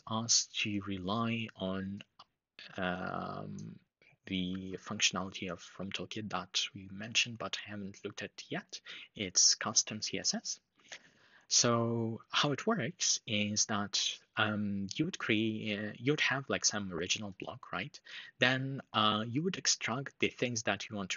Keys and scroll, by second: 4.2 super+c.